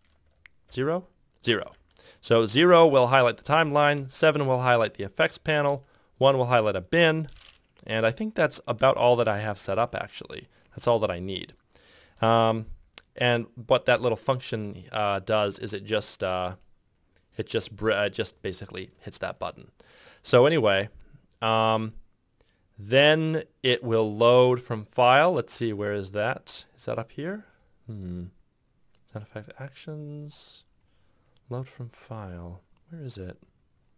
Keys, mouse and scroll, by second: 0.5 ctrl+alt+shift+0, 3.0 ctrl+alt+shift+7, 3.5 ctrl+alt+shift+0, 3.8 ctrl+alt+shift+7, 5.5 ctrl+alt+shift+1, 8.6 ctrl+alt+shift+7, 9.6 ctrl+alt+shift+0, 10.7 ctrl+alt+shift+7, 10.9 ctrl+alt+shift+0, 13.8 ctrl+F6.